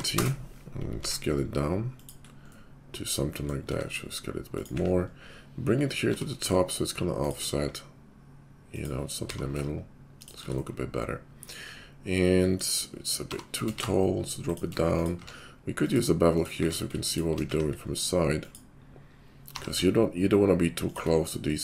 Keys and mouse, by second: 0.8 s, 2.3-18.4 middle drag, 3.6 s, 4.7 `, 6.1 g, 7.5 s, 9.6 g, 13.2 g, 15.2 q, 16.5 q, 17.5 `, 18.4 click, 18.5-21.6 middle drag, 19.5 g.